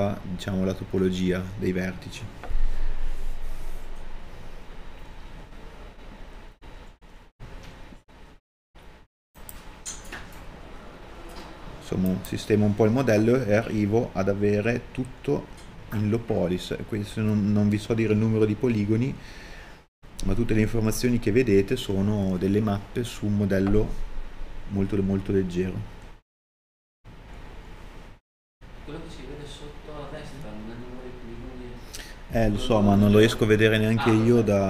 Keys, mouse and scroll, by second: 8.5 KP_Enter, 9.4-11.0 scroll up 1, 12.1 middle click, 18.0 shift+d.